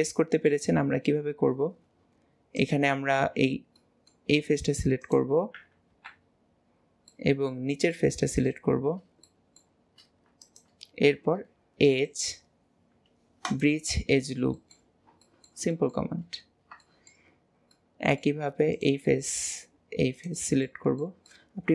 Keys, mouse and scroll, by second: 0.5 middle click, 1.3 Tab, 2.6 click, 3.8-5.0 middle drag, 5.0 click, 5.9 KP_Decimal, 6.7 scroll down 1, 7.2-8.2 middle drag, 8.2 shift+click, 8.4 shift+click, 9.3-10.5 middle drag, 10.5 shift+click, 12.0-14.6 drag, 14.6 middle click, 15.0 scroll down 1, 15.3 shift+middle click, 16.2 scroll down 2, 16.9 shift+middle click, 17.5-17.8 scroll up 1, 17.8-18.8 middle drag, 18.8 click, 19.1-20.2 middle drag, 20.2 shift+click, 20.7 middle click.